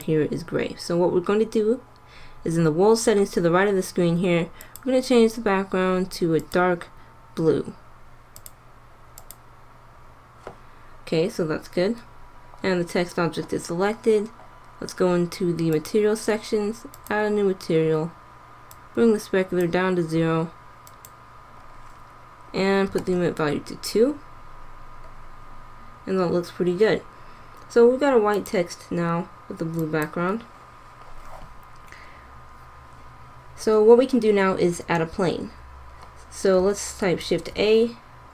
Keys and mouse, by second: 0.0-1.7 drag, 4.7-6.5 drag, 15.8-20.6 drag, 20.6 middle click, 21.0-22.6 drag, 22.6-26.8 middle drag, 28.4-30.0 drag, 37.1 shift+a.